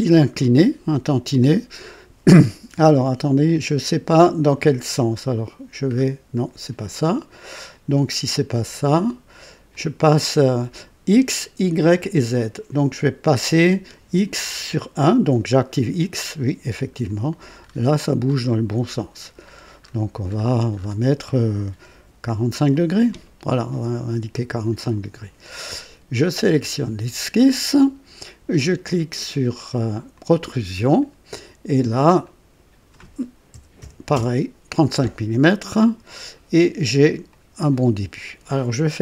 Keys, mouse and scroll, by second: 0.9 click, 5.2-6.2 scroll up 4, 8.5 scroll down 2, 9.7 click, 13.2 click, 14.4 scroll up 2, 15.6 click, 17.0 click, 17.6 scroll up 2, 18.2-21.0 scroll up 7, 21.9 KP_4, 22.2 KP_5, 24.6 click, 26.2 click, 30.1 click, 32.2 click, 33.5 KP_3, 33.8 KP_5, 34.1 Return, 35.8 click, 37.3 click.